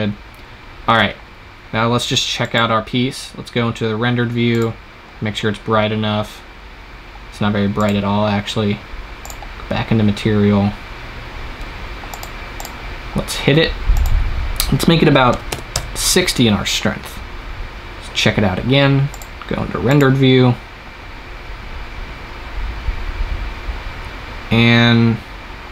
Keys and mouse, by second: 2.3-4.1 drag, 11.4 click, 11.5 middle click, 12.0-17.1 drag, 17.1-19.0 middle drag, 19.0-21.3 drag.